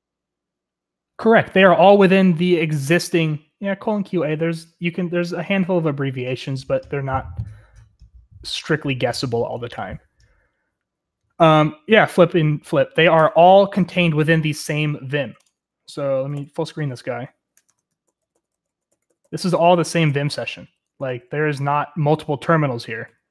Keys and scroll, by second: 16.4 super+m, 17.7 Escape, 18.1 ctrl+w, 18.2 ctrl+v, 18.3 ctrl+w, 18.5 ctrl+v, 18.9 ctrl+w, 19.2 ctrl+w, 19.2 ctrl+s, 19.3 ctrl+s, 19.5 ctrl+w, 19.6 ctrl+s, 20.2 ctrl+w, 21.3 ctrl+s, 21.6 k.